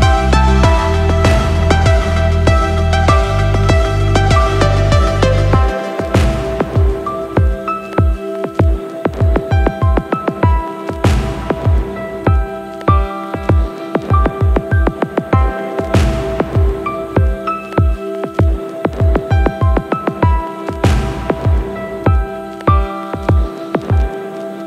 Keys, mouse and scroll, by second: 1.5 click, 2.7 space, 10.1 space, 11.3 click, 12.2-13.2 scroll down 2, 13.7 click, 14.0-14.5 scroll down 2, 14.5 click, 14.8-15.4 scroll down 3, 15.4 click, 16.5 click, 17.7 space.